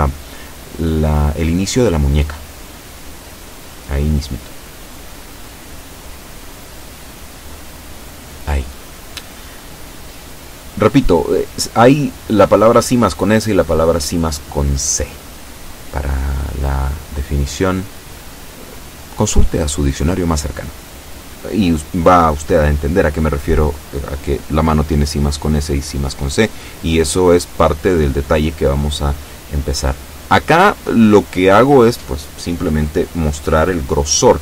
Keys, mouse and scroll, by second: 0.3-2.0 drag, 2.6-3.6 drag, 6.8 shift+middle click, 7.6 shift+scroll down 1, 9.1-10.7 shift+middle drag, 11.6-12.1 scroll up 1, 12.4 middle click, 13.1-13.8 scroll down 2, 14.1 shift+middle click, 27.8-30.5 middle drag, 30.9-31.9 shift+middle drag, 32.0 shift+scroll up 2.